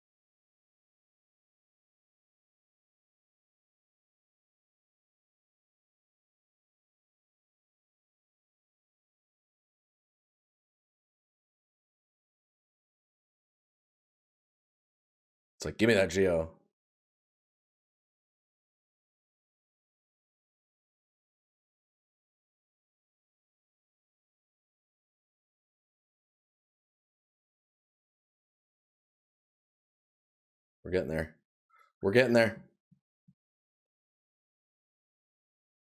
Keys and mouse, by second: 1.5 right click, 7.5 right click, 15.3 right click, 18.6 right click, 24.2 right click, 25.6 right click, 29.5 right click, 31.6 right click.